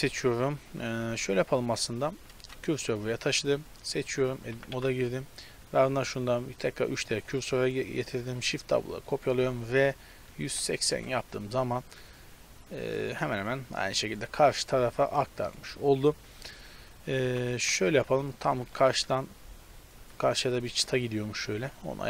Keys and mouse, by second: 0.1 z, 0.2 KP_7, 1.1 Tab, 1.3-2.7 right drag, 2.5 shift+s, 3.7 right click, 4.3 Tab, 4.5 a, 4.7 a, 8.4 shift+d, 9.7 r, 13.3 z, 17.0-19.0 typing, 19.7 click, 21.8 shift+d.